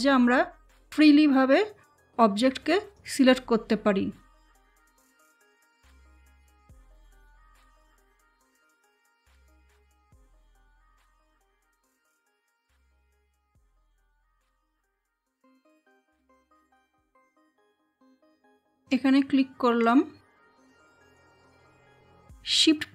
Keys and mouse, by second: 0.8-4.9 drag, 4.9-9.2 drag, 9.4-13.7 drag, 15.1 click, 18.7-22.9 drag.